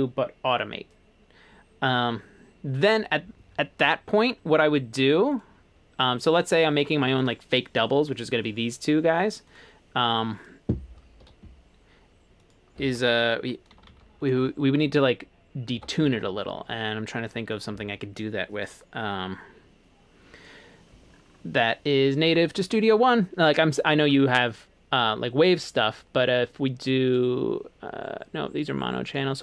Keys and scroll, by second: 11.3 Escape, 13.5-14.5 typing, 15.8 Escape.